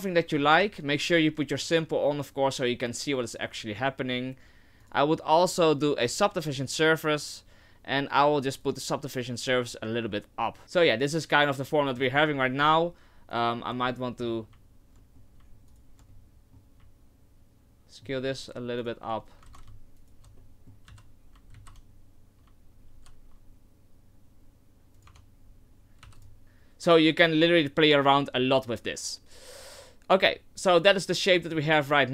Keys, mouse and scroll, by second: 0.5 Tab, 1.6 click, 4.8 click, 8.6 click, 10.6 Tab, 10.6 middle click, 12.0 Tab, 13.3 alt+right click, 13.9 middle click, 15.0 middle click, 15.7 alt+shift+right click, 16.1 middle click, 17.8 ctrl+z, 17.8 alt+shift+right click, 17.8 middle click, 18.8 alt+shift+right click, 19.5 ctrl+z, 20.0 alt+shift+right click, 20.4 middle click, 20.9 s, 25.1 Tab, 25.4-25.9 scroll down 3, 26.0 w, 29.8 click, 31.5 middle click.